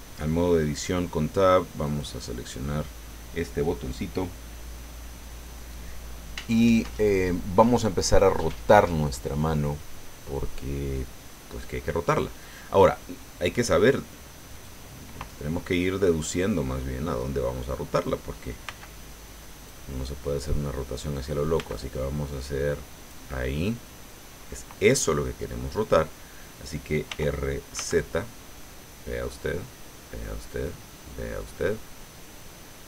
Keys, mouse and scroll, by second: 1.8 click, 14.5 click, 15.9-17.6 middle drag, 18.6 b, 19.7-21.1 drag, 21.5 b, 21.7-23.3 drag, 27.0 r, 27.7 z.